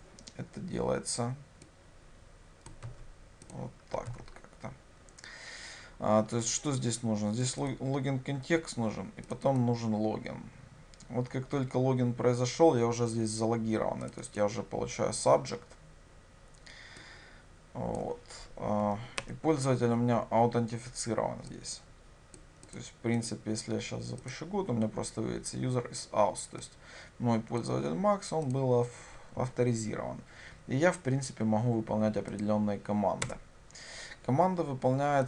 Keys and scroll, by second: 2.9 ctrl+c, 4.1 ctrl+v, 24.3 ctrl+shift+F10.